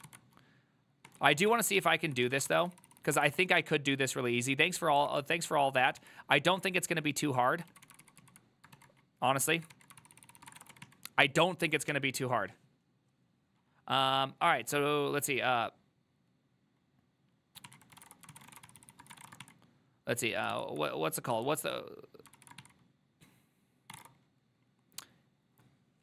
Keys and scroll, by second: 0.0-3.9 typing, 1.8 ctrl+), 2.6 ctrl+c, 2.7 ctrl+c, 2.8 ctrl+c, 3.0 ctrl+c, 5.2 alt+[, 5.4 alt+{, 5.9 ctrl+a, 6.1 2, 7.8 ctrl+a, 7.9-11.4 typing, 8.1 ctrl+u, 8.3 ctrl+u, 9.6 ctrl+a, 10.1 ctrl+c, 10.2 ctrl+c, 10.3 ctrl+c, 18.1-20.0 typing, 20.6 ctrl+c, 22.4 ctrl+c, 22.4 typing, 23.7-24.5 typing.